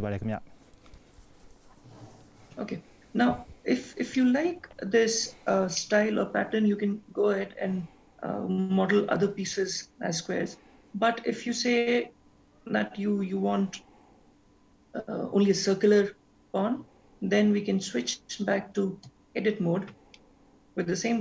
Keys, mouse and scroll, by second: 4.2 middle click, 5.8 middle click, 19.1 Tab, 20.1 middle click.